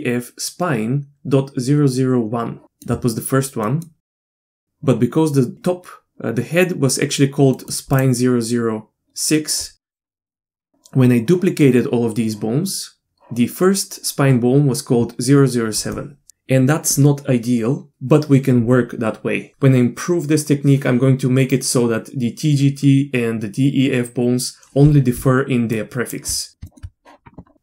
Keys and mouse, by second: 2.6 shift+middle click, 3.6 middle click, 4.1 middle click, 4.2 shift+middle drag, 4.4 middle click, 4.6 middle click, 7.5 middle click, 10.2 shift+middle click, 25.1 d, 25.6 d, 25.7 click, 25.7-26.2 d, 26.7 middle click.